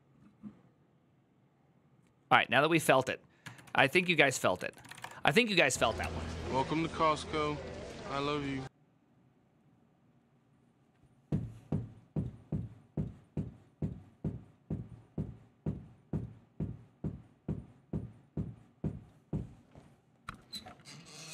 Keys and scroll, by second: 4.4-5.1 typing.